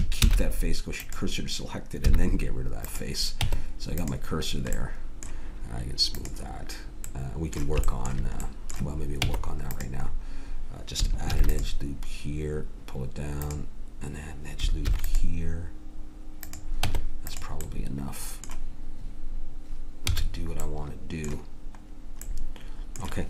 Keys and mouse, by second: 0.2 shift+s, 2.0 x, 3.3 Tab, 4.4 middle click, 9.2 Tab, 11.2 ctrl+r, 13.9-14.9 drag, 14.9 ctrl+r, 16.8 Tab, 20.1 a.